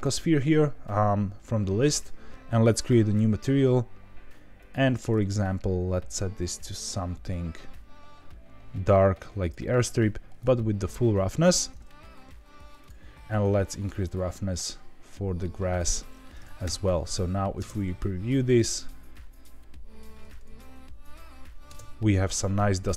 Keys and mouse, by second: 4.6 click, 10.4 click, 12.8 click, 14.0-15.8 drag, 16.6 KP_0, 17.5 space, 21.6 space.